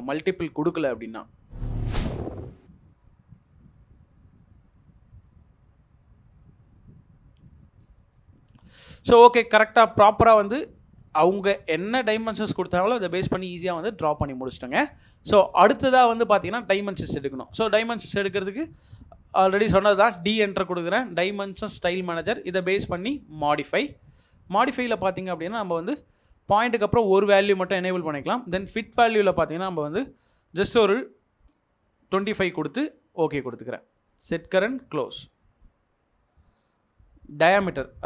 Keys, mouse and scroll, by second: 1.1-1.6 scroll up 1, 2.3 double click, 7.8-8.1 scroll down 1, 8.3 middle click, 8.8 Escape, 9.2 middle click, 18.2 middle click, 19.6-20.5 typing, 31.8-32.7 typing, 35.6 middle click.